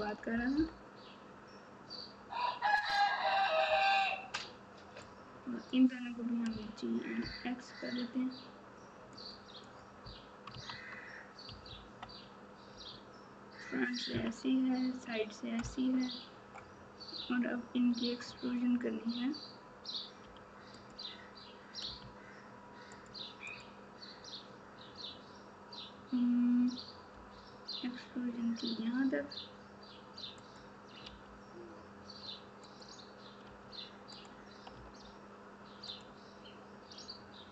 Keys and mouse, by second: 0.3 KP_4, 0.5 KP_4, 5.0 click, 9.6 click, 10.5 Tab, 11.4 KP_Subtract, 11.6 KP_Subtract, 11.8 KP_Subtract, 12.7 KP_1, 22.9 click, 31.0 r, 33.4 s.